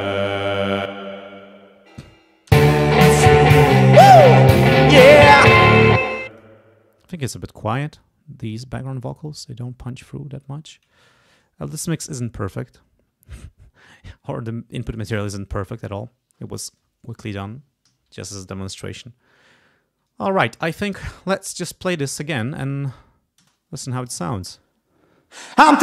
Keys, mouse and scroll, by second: 0.9 space, 1.9 click, 2.5 space, 3.8 scroll down 2, 5.2 ctrl+scroll down 2, 6.0 space, 6.3 click, 8.4 click, 8.9-10.1 drag, 10.4 click, 11.1 ctrl+scroll up 2, 12.1 click, 17.9 ctrl+s, 20.2 ctrl+scroll down 2, 20.8-21.4 ctrl+scroll up 2, 21.4 ctrl+click, 23.4 space.